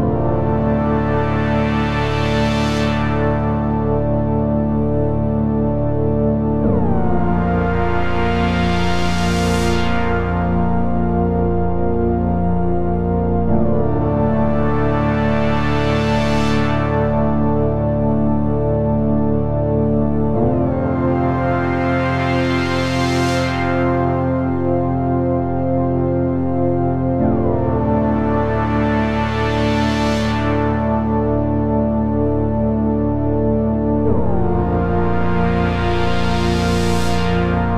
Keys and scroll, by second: 6.0 Delete, 9.8 p, 11.9 ctrl+z, 14.7 ctrl+z, 21.5 Return, 22.5 Return, 23.7 Return, 24.7 Return, 32.5 Return, 34.9 ctrl+z, 36.5 ctrl+z.